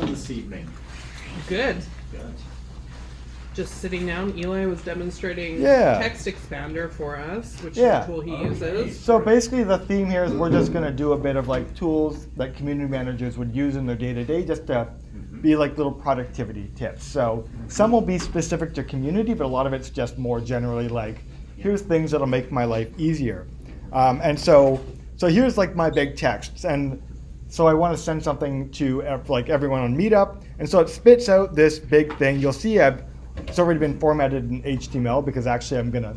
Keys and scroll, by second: 4.3 super+Tab.